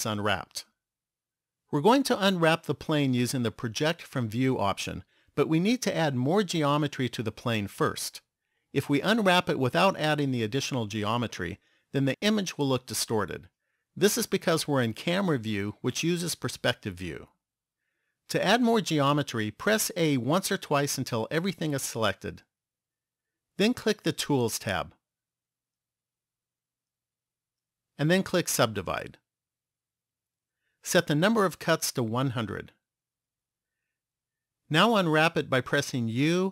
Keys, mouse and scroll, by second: 20.1 a, 20.8 a, 24.5 click, 26.3 click, 29.1 click, 31.6 click, 33.1 KP_0.